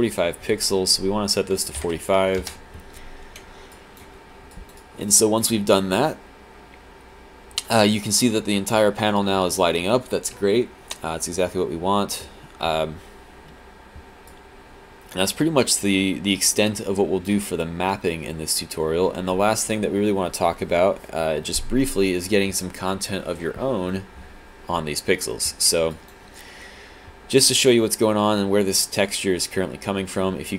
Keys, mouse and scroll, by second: 2.5 Return, 3.8 click, 4.5 click, 4.8 right click, 5.1 click, 14.3 alt+click, 25.9 alt+click.